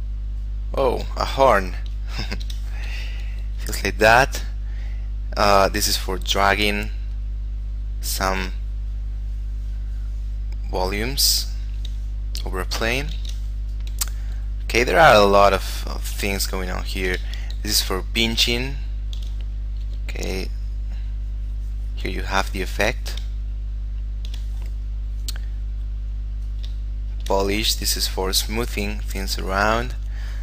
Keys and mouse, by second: 2.5 ctrl+z, 3.1 click, 5.6 click, 6.1 f, 6.6 click, 13.4 ctrl+z, 13.9 click, 15.8 shift+middle click, 16.6 shift+middle click, 17.6 ctrl+middle click, 18.8 ctrl+middle click, 20.0 f, 20.6 click, 23.6 shift+middle click, 26.6 click, 27.1 shift+middle click, 27.6 click.